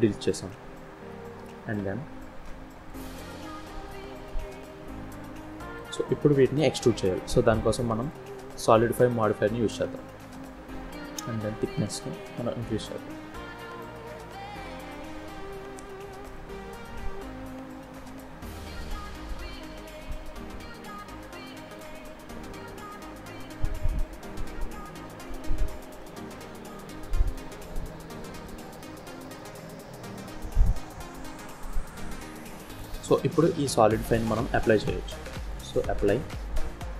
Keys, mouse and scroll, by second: 3.7 click, 4.5 n, 5.5 scroll up 1, 5.7 middle click, 6.6-7.1 scroll down 3, 7.9 click, 10.7 click, 11.8 click, 14.5 KP_7, 16.2 click, 18.4-19.4 scroll up 2, 20.8 click, 22.5 scroll down 2, 22.8 middle click, 25.5 scroll down 2, 26.0 middle click, 27.4-27.9 scroll up 2, 27.9-28.3 scroll down 2, 28.3 middle click, 29.8 scroll up 1, 30.1 shift+middle click, 31.0-31.5 scroll up 1, 31.6 middle click, 32.6 scroll down 3, 34.2 click, 35.9 middle click.